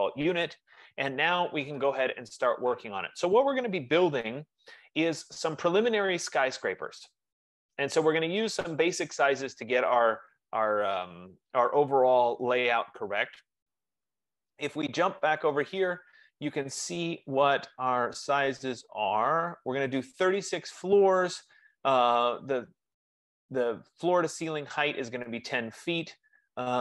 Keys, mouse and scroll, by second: 15.5-20.5 drag.